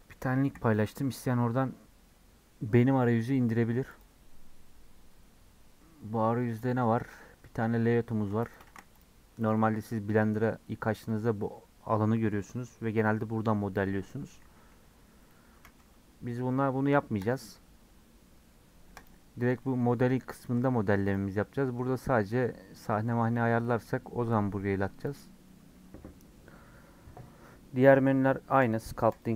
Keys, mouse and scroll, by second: 1.6-3.3 scroll down 1, 3.3-3.9 scroll down 1, 3.9-13.5 drag, 14.5 s, 18.9 click, 19.4 scroll down 2, 19.5-21.0 middle drag, 21.0-29.3 drag.